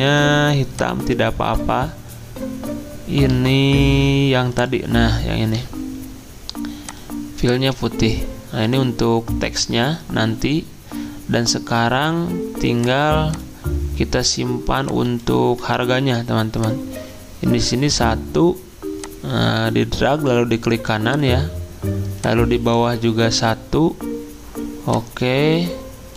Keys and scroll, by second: 16.0 ctrl+g.